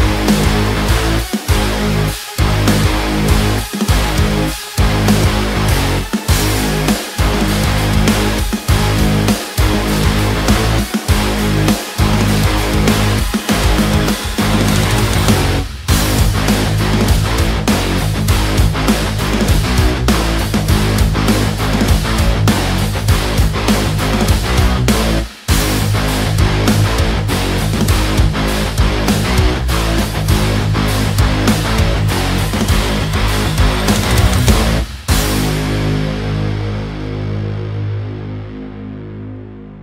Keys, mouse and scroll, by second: 1.1-3.1 drag, 3.9 click, 4.0 ctrl+space, 4.1 ctrl+click, 4.2 ctrl+space, 5.4 ctrl+click, 9.0 click, 9.7-12.3 drag, 12.5-16.4 drag, 16.4 ctrl+t, 16.8-18.9 drag, 19.2 ctrl+space, 19.4 click, 19.6 ctrl+click, 20.2-21.3 ctrl+drag, 21.3 ctrl+t, 21.6-23.0 drag, 23.0 space, 23.4 ctrl+click, 23.9 ctrl+space, 24.0 ctrl+click, 24.5-26.0 ctrl+drag, 26.0 right click, 26.5 click, 32.5 click, 32.6-37.4 drag, 38.2 ctrl+space, 38.9 ctrl+click, 39.1 ctrl+space.